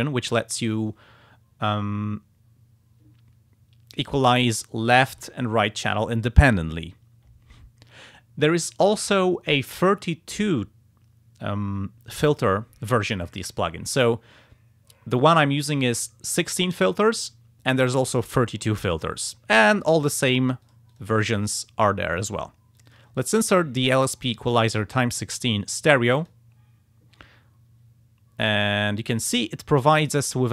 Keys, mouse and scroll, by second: 15.8 click, 18.2 click, 20.3 click, 20.7 click, 22.2 click, 22.8 click, 26.2 click.